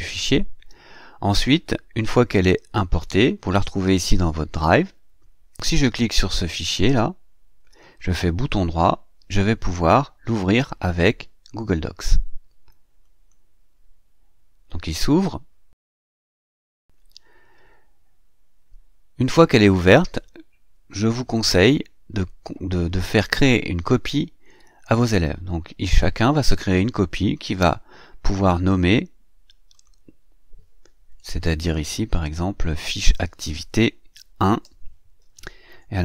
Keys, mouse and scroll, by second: 5.9 click, 7.6 right click, 12.9 click, 21.1 click, 27.0 click, 29.6 click, 31.1 BackSpace, 32.6 Delete, 33.2 click, 35.0 KP_1, 35.5 KP_Decimal.